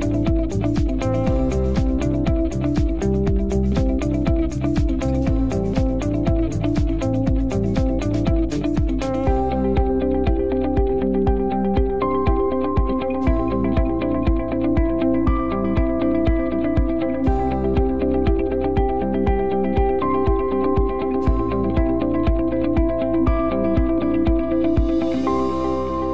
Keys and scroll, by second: 3.2 BackSpace, 6.3 space.